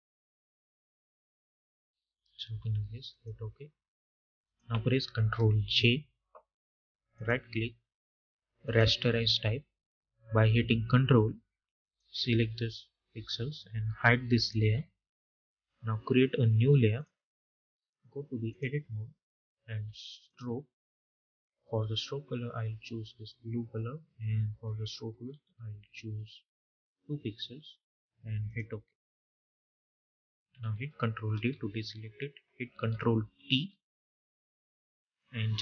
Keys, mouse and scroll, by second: 2.9 click, 5.5 ctrl+j, 7.0 right click, 8.5 click, 16.8 click, 28.3 click, 31.2 ctrl+d, 35.0-35.6 drag.